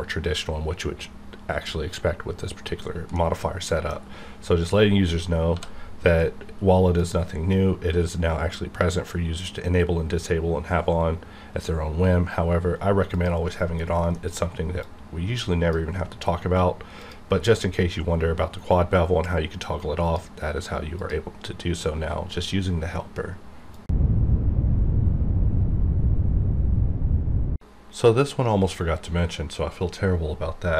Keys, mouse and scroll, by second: 3.1-4.6 middle drag, 4.6 right click, 5.5 d, 6.9 click, 13.1 click, 13.7 scroll down 1, 14.1 middle click, 14.4 scroll up 1, 14.8-17.0 drag, 17.4-18.5 scroll up 1, 18.5-19.2 scroll down 1, 19.2-21.0 drag.